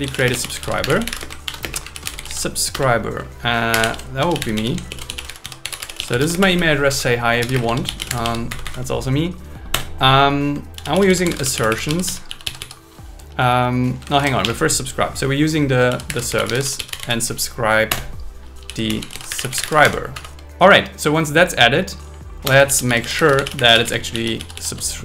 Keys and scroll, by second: 0.3 space, 1.5 shift+o, 1.8 space, 1.9 shift+s, 2.7 Return, 3.5-4.4 typing, 4.9 alt+l, 6.9 Right, 7.5-8.4 typing, 8.5 Right, 9.7 Return, 10.7 shift+a, 11.5 shift+a, 14.1 shift+super+Left, 14.4 BackSpace, 17.9 Return, 19.8 Escape, 20.1 Right, 22.5 Return, 22.7 shift+a, 23.5 shift+a.